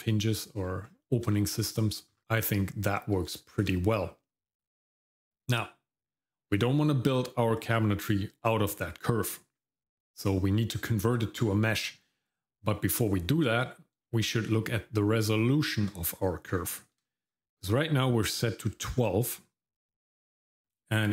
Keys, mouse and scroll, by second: 0.8 scroll down 1, 1.3 shift+middle click, 2.1-2.7 scroll up 2, 2.7 shift+middle click, 3.3 shift+middle click, 14.0 shift+middle click, 17.1 shift+middle click.